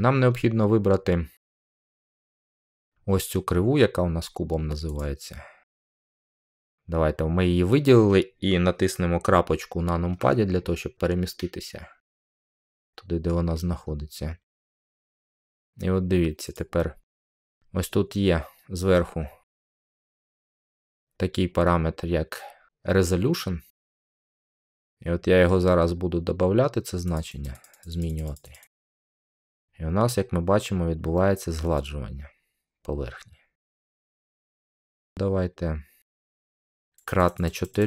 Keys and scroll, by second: 10.0 scroll down 1.